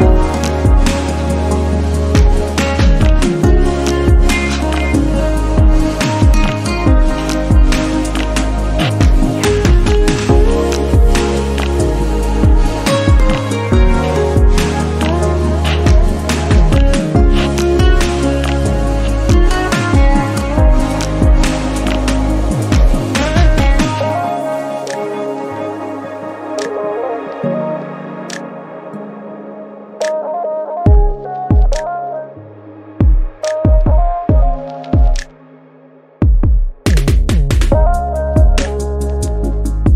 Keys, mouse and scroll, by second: 0.0 shift+middle drag, 0.4 Tab, 0.9 shift+middle click, 1.3 scroll down 2, 1.5 shift+middle click, 1.7-2.3 scroll up 1, 2.3 alt+z, 2.6 shift+middle click, 3.3 click, 4.0 click, 5.5 click, 6.4 click, 7.0 click, 7.3 shift+middle click, 8.1 click, 8.4 shift+middle click, 8.8 shift+click, 9.3 click, 9.8 click, 10.1 shift+middle click, 10.6 click, 11.3 scroll down 1, 11.4-12.6 shift+middle drag, 12.6 shift+click, 13.2 shift+middle click, 13.7 click, 15.1 click, 16.4 shift+middle click, 16.7 scroll up 1, 17.0 shift+middle click, 17.9 click, 19.1 click, 19.3 scroll down 1, 19.6 shift+middle click, 20.5-20.9 scroll up 1, 20.9 click, 21.4 click, 22.3 click, 22.5 shift+middle click, 22.9 click, 24.1 click, 24.8 x, 26.1 click, 26.6 click, 26.9 shift+middle click, 27.8-28.5 scroll up 1, 28.5 click, 29.3 x, 30.1 click, 30.6 click, 31.6 click, 32.5 x, 33.0 shift+middle click, 33.5 click, 34.3 click, 35.0 click, 35.3-35.6 scroll down 5, 35.6-36.8 shift+middle drag, 36.8-38.8 scroll up 4, 37.0 shift+middle click, 38.8 click, 39.6 click.